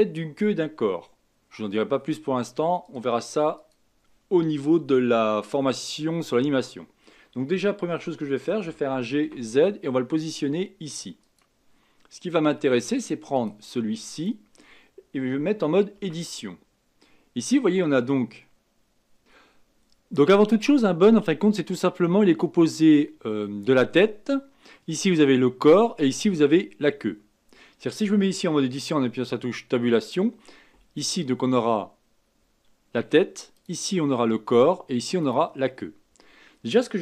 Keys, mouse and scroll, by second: 2.8 click, 3.6 click, 8.6 g, 13.3 click, 14.1 click, 15.9 Tab, 29.5 Tab, 30.9 click, 33.5 click, 35.2 click.